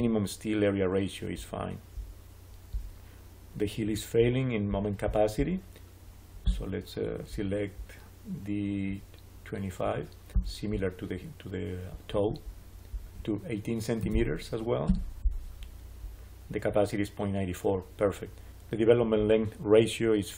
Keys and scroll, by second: 13.6-14.5 typing, 14.7 Return.